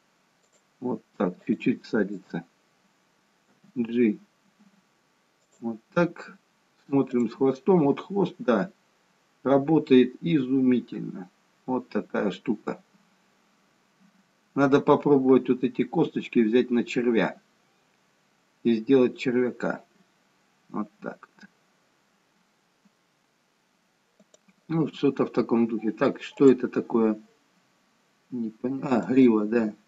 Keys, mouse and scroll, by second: 1.5 click, 2.2 click, 3.6 g, 7.3 click, 8.0 g, 26.4 click, 27.0 g.